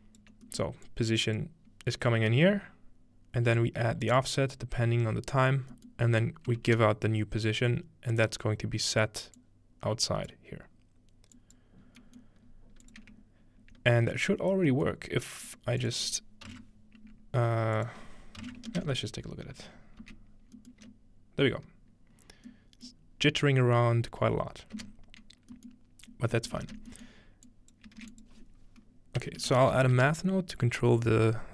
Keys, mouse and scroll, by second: 0.0-0.5 scroll down 1, 0.5 middle click, 0.9-1.5 drag, 3.6-4.7 drag, 4.1 right click, 7.1 scroll down 1, 8.1-9.1 drag, 9.4 click, 11.4 click, 11.8-14.1 scroll up 3, 12.5-12.9 middle drag, 12.9 click, 14.1 ctrl+Tab, 15.5 click, 15.8 click, 16.5-17.6 drag, 17.8-20.7 drag, 20.7-22.3 middle drag, 20.7 z, 20.8 space, 25.7 middle click, 26.5 ctrl+middle click, 27.2-28.7 scroll up 2, 27.5-28.9 drag, 28.0 shift+a, 29.5-30.5 typing.